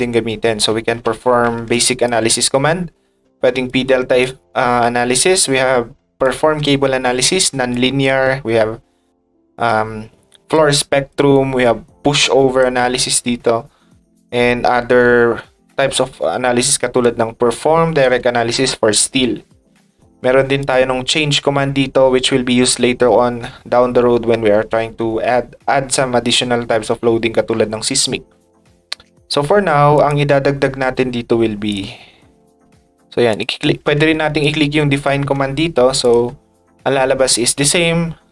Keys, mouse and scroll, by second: 1.7 ctrl+shift+click, 3.7 ctrl+click, 6.2 ctrl+shift+click, 7.7 ctrl+shift+click, 10.5 ctrl+shift+click, 12.2 click, 17.0 click, 20.6 click, 30.0 click, 31.7 click, 33.3 click, 34.4 ctrl+click.